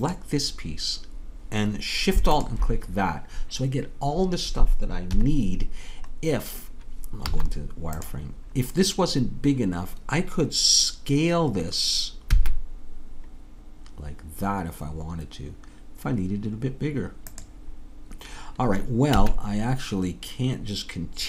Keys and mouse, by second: 1.8-5.1 drag, 5.1 KP_3, 7.3 z, 12.4 s, 19.2 a.